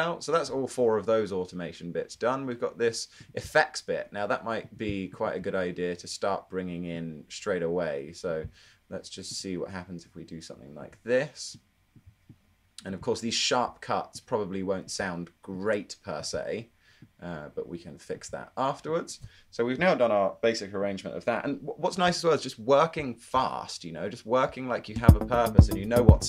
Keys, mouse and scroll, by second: 26.0 super+z.